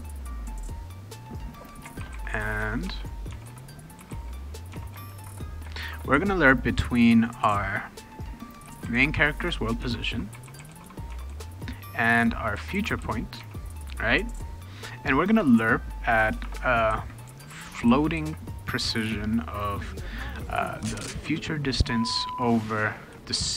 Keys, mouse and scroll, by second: 1.7-5.8 typing, 4.7 Tab, 8.4-13.9 typing, 16.0-18.3 typing, 20.6-22.1 typing, 21.8 Tab, 23.1-23.5 typing.